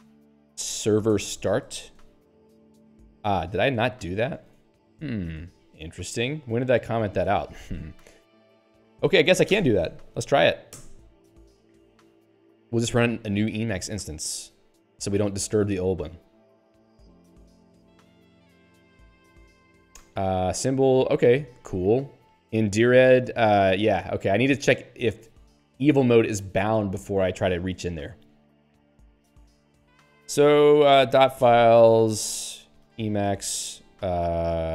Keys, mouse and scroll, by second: 0.4-2.4 typing, 3.7 Left, 4.4 ctrl+s, 5.8 Right, 7.6 ctrl+s.